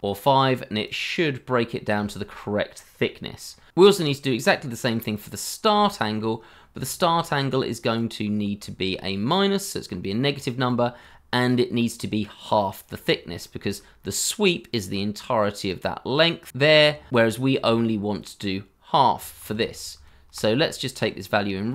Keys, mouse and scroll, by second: 1.0 double click, 3.5 scroll up 1, 4.1 shift+middle click, 5.9 shift+middle click, 6.4 scroll down 1, 6.8 shift+middle click, 8.6 shift+middle click, 10.6 shift+middle click, 13.3-14.8 scroll up 1, 19.4 ctrl+z.